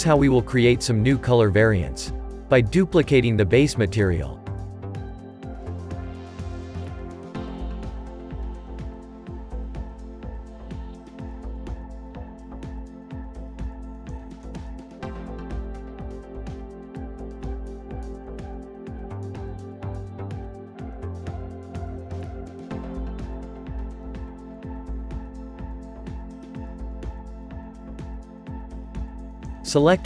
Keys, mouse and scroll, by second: 8.0 click, 15.1 click, 15.3 scroll down 2, 15.7-18.9 shift+middle drag, 19.6 click, 23.6 click, 24.3 click, 25.3-25.8 scroll up 1, 25.8-27.8 shift+middle drag, 27.8-29.3 scroll down 1, 29.3 click.